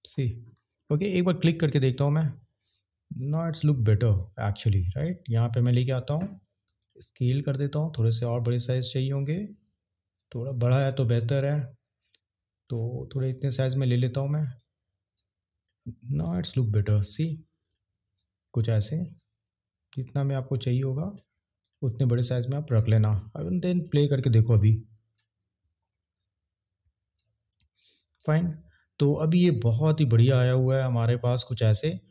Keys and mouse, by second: 1.8 drag, 3.6 drag, 4.6 click, 6.8 click, 8.4 click, 12.2 click, 13.8 click, 14.5 click, 19.0 click, 23.7 click, 31.6 click.